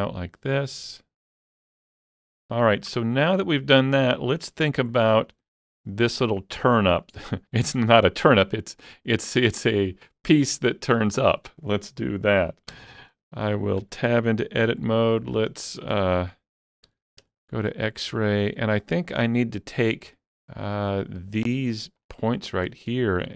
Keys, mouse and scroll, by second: 2.4 scroll down 1, 2.5 middle click, 2.6 alt+z, 3.0 scroll down 1, 3.3-13.2 middle drag, 12.7 KP_7, 13.2 Tab, 13.2 shift+middle click, 13.8 Tab, 16.9 alt+z, 20.9 click, 22.0 ctrl+click, 22.7 scroll down 1, 23.2 scroll up 1.